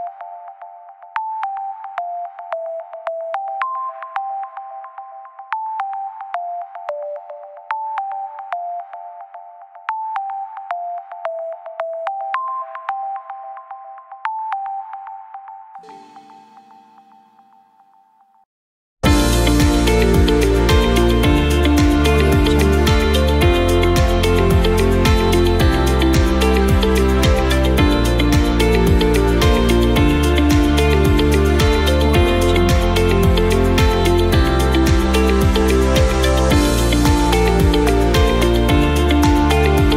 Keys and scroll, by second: 15.2 s, 18.5-19.4 typing, 21.7 typing.